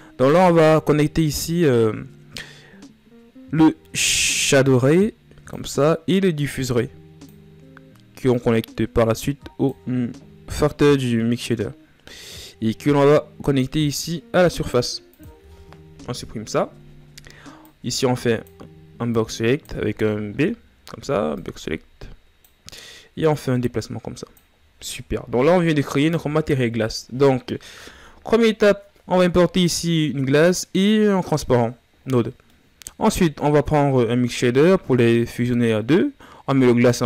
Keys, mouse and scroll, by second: 0.1-10.4 drag, 13.4-15.6 drag, 15.6 Delete, 19.4 ctrl+z.